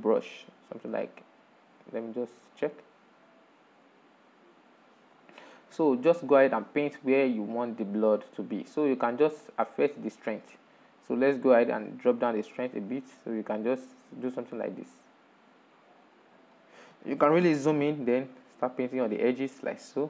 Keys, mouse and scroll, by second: 2.7 scroll up 4, 4.8-6.2 drag, 6.2 middle click, 6.8-7.1 scroll up 5, 7.3 middle click, 7.9-9.9 drag, 9.9-11.7 middle drag, 11.7-17.4 drag, 17.4-17.9 scroll up 1, 17.9 shift+middle click, 18.7-20.0 drag.